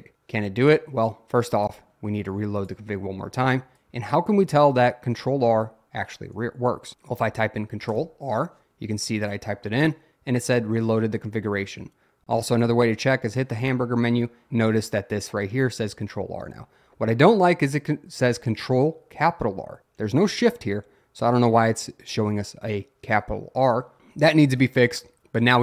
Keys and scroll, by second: 7.9 ctrl+r.